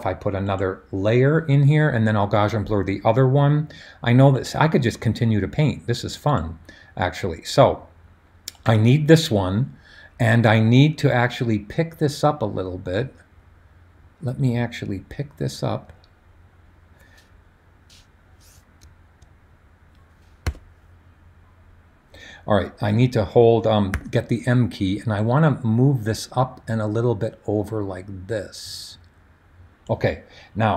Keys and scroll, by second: 20.4 b, 23.9 m.